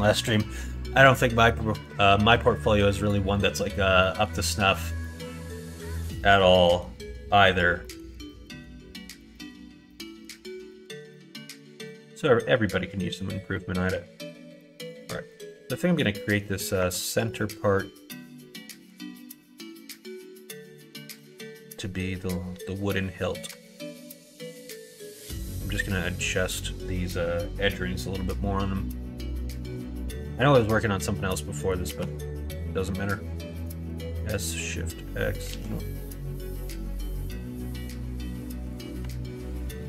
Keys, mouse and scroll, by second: 4.0 middle click, 4.4 middle click, 5.0 middle click, 5.4 middle click, 5.8 middle click, 6.2 middle click, 6.6 middle click, 7.8 middle click, 8.3 shift+middle click, 8.9 middle click, 9.3 shift+middle click, 9.8 middle click, 10.3 shift+middle click, 10.7 middle click, 11.1 middle click, 11.8 middle click, 13.5 middle click, 14.5 click, 15.3 middle click, 15.9 middle click, 16.7 Tab, 17.2-18.8 middle drag, 19.1 middle click, 20.2 middle click, 20.8 KP_1, 21.1 KP_3, 23.7 alt+click, 24.7 2, 25.1 click, 30.0 s, 31.8 ctrl+z, 33.5 s, 35.5 ctrl+z, 36.2 g, 39.4 alt+click.